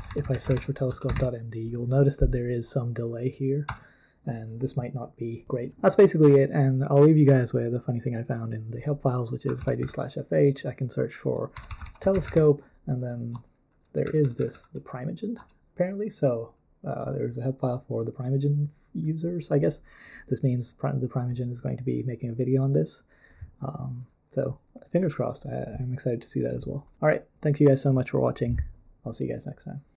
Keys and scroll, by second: 0.0-1.6 typing, 3.4-4.2 typing, 9.2-14.7 typing, 15.4 Return.